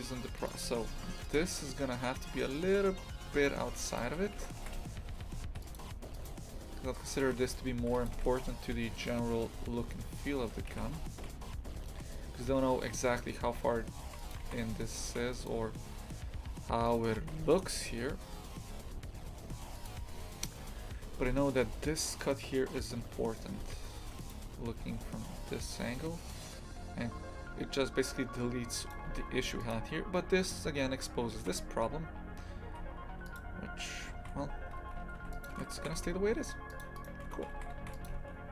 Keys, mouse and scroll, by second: 0.7 shift+f, 3.4 shift+f, 4.1 a, 4.6 shift+f, 6.2-7.3 right drag, 7.3 shift+f, 8.2 a, 10.7 shift+f, 14.5 shift+f, 17.0 click, 17.2 shift+f, 23.6 shift+f, 28.9 click, 29.1 shift+f, 31.4 shift+f, 35.8 shift+f, 37.0 right click, 37.3 Tab, 37.6 shift+f, 38.1 a.